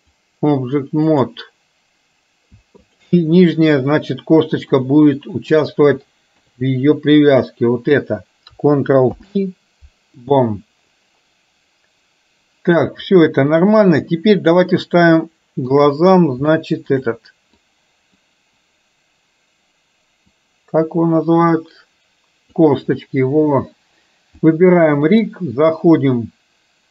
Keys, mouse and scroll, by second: 1.1 click, 5.0 click, 6.5 KP_3, 7.4 click, 9.1 ctrl+p, 13.1-13.9 drag, 15.4-15.7 shift+middle drag, 16.6-17.0 shift+middle drag, 17.6-18.4 drag, 20.4 click, 20.6-22.7 drag, 24.5 click.